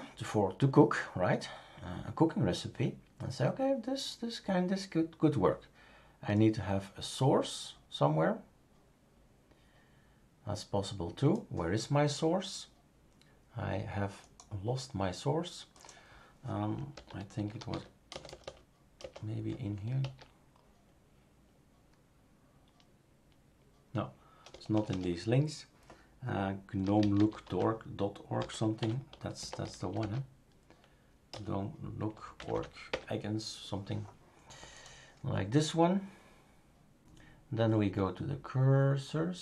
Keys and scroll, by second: 16.7-18.4 typing, 20.0 typing, 24.5 BackSpace, 24.7 BackSpace, 24.9 BackSpace, 26.6-31.3 typing, 32.4 Down, 32.5 Down, 32.9 Return.